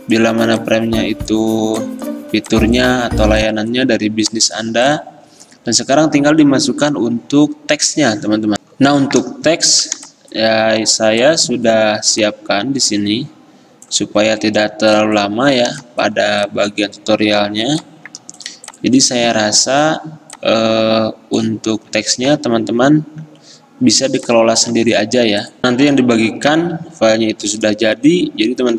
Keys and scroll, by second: 8.7 F10, 9.8 Delete, 12.7 F10, 17.5 Delete.